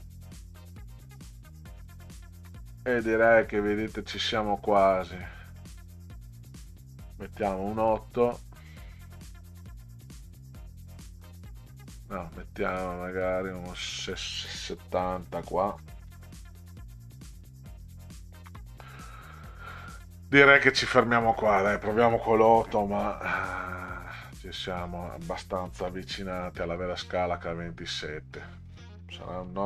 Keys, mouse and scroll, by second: 1.3 click, 2.5 BackSpace, 4.9 click, 7.5 8, 9.9 click, 11.0 Delete, 13.4 click, 15.7 7, 17.5 click, 21.2 click, 22.7 8, 24.7 click, 25.9 BackSpace, 28.1 click.